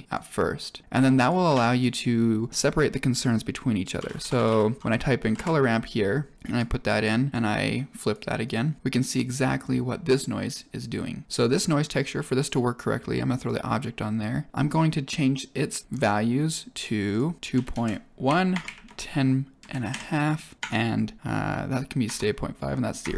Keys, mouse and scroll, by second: 1.1 click, 1.5 shift+a, 6.3 click, 7.7-8.1 drag, 8.4-8.7 drag, 9.2 click, 11.3 click, 13.4-14.5 drag, 17.1 click, 17.4 click.